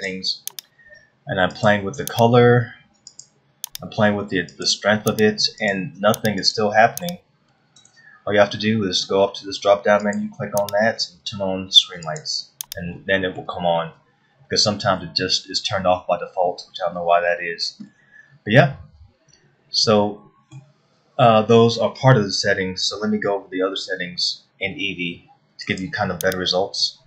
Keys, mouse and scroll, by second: 0.6 click, 2.2 click, 5.1 click, 7.0 click, 10.7 click, 13.9 middle click, 18.6 middle click, 26.4 click.